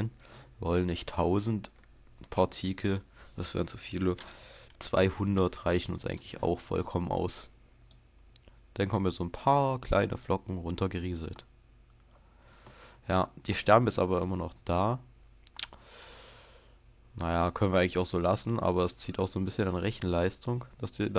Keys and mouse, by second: 2.7-4.3 drag, 5.3 KP_0, 7.9-10.5 drag, 14.2-21.1 drag.